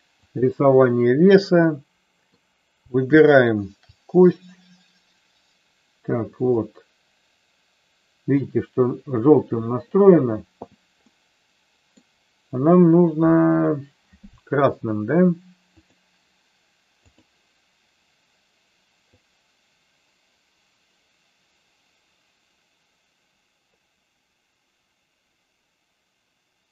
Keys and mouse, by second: 1.8 middle click, 3.4 shift+click, 6.6-8.6 middle drag, 11.0-12.0 middle drag, 15.8-17.3 drag, 19.2-26.7 drag.